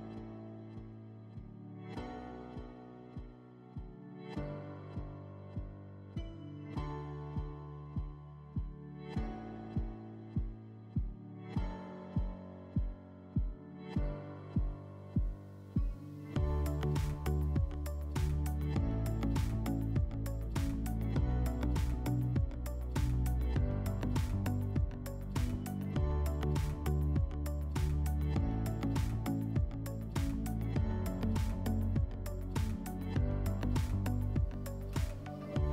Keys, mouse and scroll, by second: 6.8 click, 10.4 click, 11.8 middle click, 12.7 alt+middle click, 15.2 click, 26.8 click, 28.7 middle click, 31.0 click.